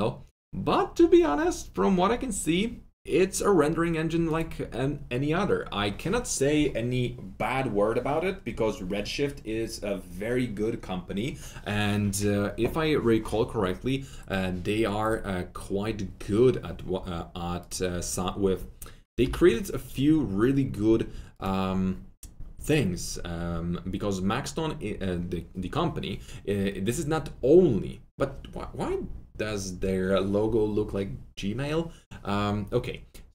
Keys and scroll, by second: 19.2 ctrl+v.